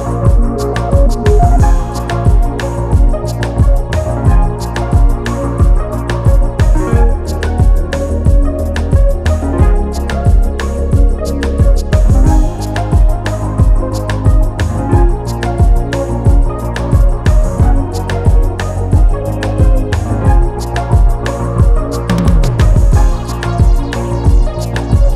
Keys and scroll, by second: 23.9 space.